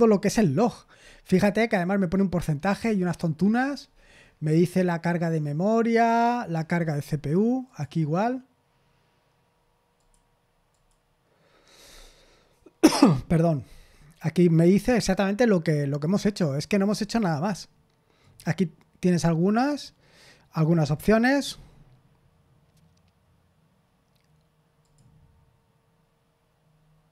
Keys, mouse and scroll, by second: 1.3 scroll up 1, 2.6-4.8 scroll down 1, 6.5-7.5 scroll down 1, 7.6 click, 9.9 click, 10.7 click, 17.1 click, 18.2 click, 21.3-24.8 scroll down 1, 24.8 click.